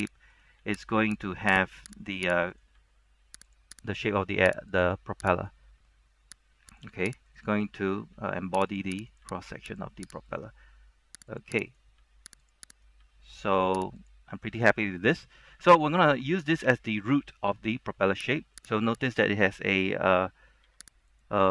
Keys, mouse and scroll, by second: 0.5 right click, 0.7 typing, 1.3 click, 1.6 right click, 1.8 typing, 2.3 click, 2.6 right click, 3.0 typing, 3.6 click, 4.0 right click, 4.1 typing, 4.8 click, 5.5 right click, 6.4 typing, 6.8 click, 7.4 right click, 7.6-8.3 typing, 8.8 click, 9.1 right click, 9.4 g, 9.8 click, 10.4 right click, 10.6 g, 11.5 click, 11.8 right click, 12.1 g, 12.6 click, 12.9 right click, 13.1 g, 14.1 click, 14.8-18.7 scroll down 1, 18.7 right click, 20.8 g, 21.2 click.